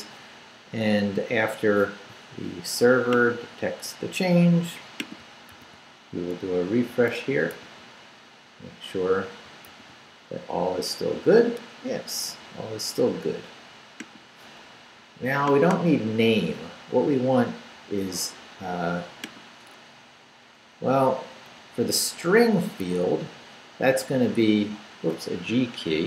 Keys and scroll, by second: 5.5 super+r, 7.5 super+r, 9.7 super+r, 19.9 Up, 20.4 Up, 21.4 Up, 22.0 Right, 24.0 u, 24.4 BackSpace, 25.9 Escape.